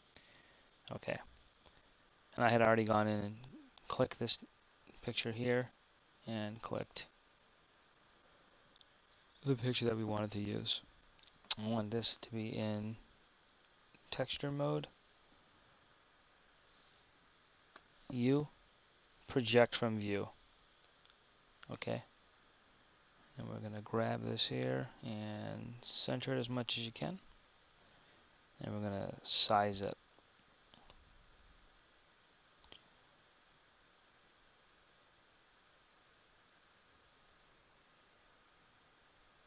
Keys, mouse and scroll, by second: 11.1 KP_1.